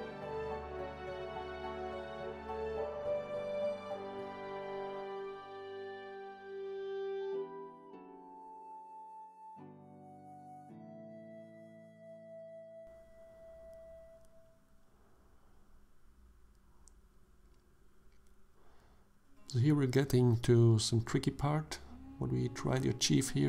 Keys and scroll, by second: 1.5 Tab, 8.3 Tab, 10.7 ctrl+r, 16.9 1, 17.7 shift+z.